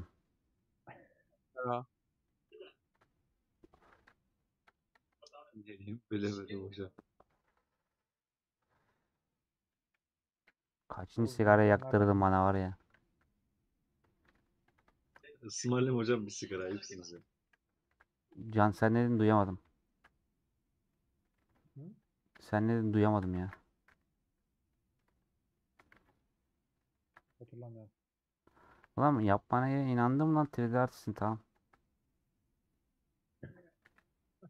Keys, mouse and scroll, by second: 7.4 Left, 9.6 click, 10.4 /, 10.6 middle click, 11.4 Tab, 11.5 middle click, 12.1 scroll up 2, 12.8 a, 13.3 middle click, 13.6 scroll up 2, 14.3 3, 14.9-15.9 shift+middle drag, 16.6 ctrl+z, 17.2 ;, 17.4 middle click, 18.0 3, 19.7 ;, 19.9-21.4 middle drag, 21.4 3, 23.4 ctrl+z, 24.4 scroll up 1, 24.6 middle click, 25.1-26.3 alt+drag, 26.3 middle click, 27.0 ctrl+z, 27.1 scroll up 1, 27.2 middle click, 27.6 scroll down 2, 28.0 middle click, 28.8 2, 28.9 alt+click, 29.7-31.7 middle drag, 31.7 alt+Left, 32.2-34.4 middle drag.